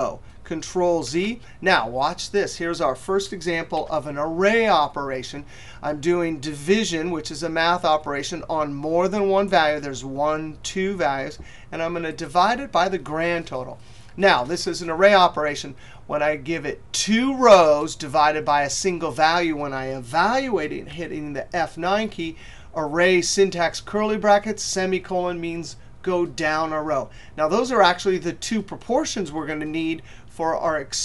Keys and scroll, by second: 19.6 F9.